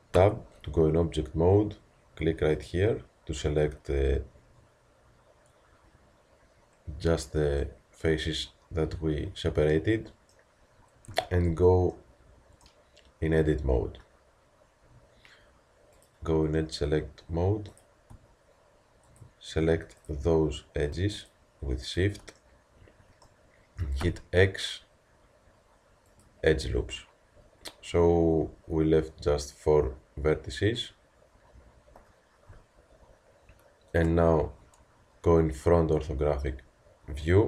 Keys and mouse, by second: 0.2 Tab, 2.7-3.7 drag, 8.0-9.6 middle drag, 11.1 Tab, 16.0-22.6 drag, 22.6-24.0 middle drag, 24.0 x, 28.5 z, 32.0 z, 34.0 KP_1.